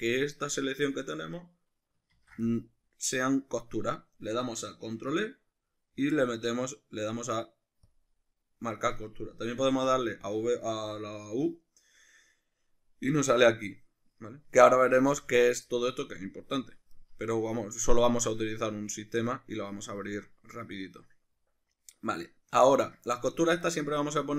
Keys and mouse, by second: 2.2 ctrl+e, 9.8 u, 14.9 u, 16.5 click, 18.2-24.3 shift+middle drag.